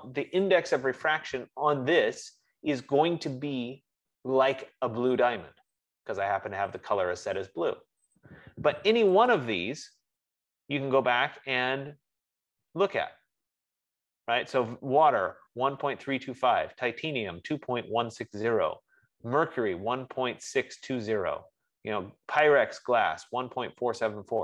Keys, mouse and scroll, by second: 0.0 Tab, 9.9 click, 12.3-13.2 scroll, 14.9 F15.